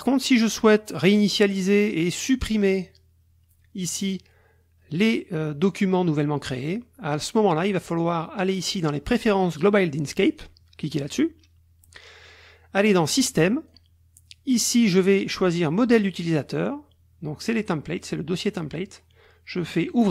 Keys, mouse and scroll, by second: 2.5 click, 4.0 click, 7.1 click, 10.3 click, 13.1 click, 19.9 click.